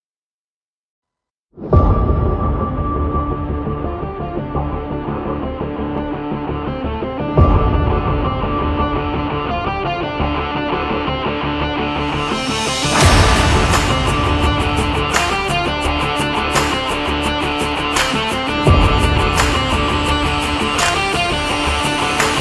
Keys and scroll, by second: 9.1 BackSpace, 22.3 ctrl+0.